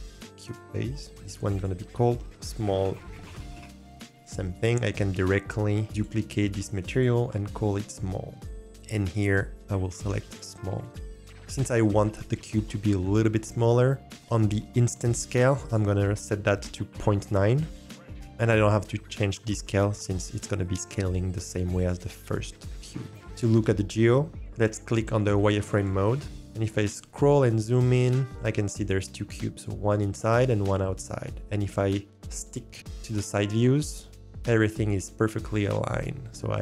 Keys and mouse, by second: 0.3 click, 1.1-3.5 drag, 3.4 l, 4.1 click, 6.0-6.4 drag, 6.9 click, 7.4 click, 9.1-10.4 drag, 15.6-21.7 drag, 25.8-26.3 drag, 27.1 shift+middle drag, 28.1-28.7 middle drag, 31.4 middle click, 33.8 shift+middle drag, 34.1 shift+middle drag, 34.3 shift+drag, 34.9 shift+click, 35.8 shift+middle drag, 36.4 shift+middle drag.